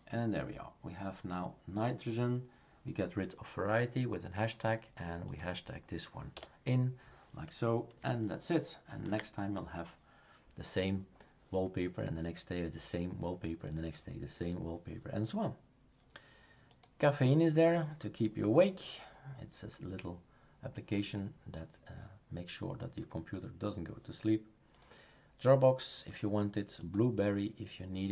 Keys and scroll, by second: 6.3 BackSpace, 9.0 ctrl+z.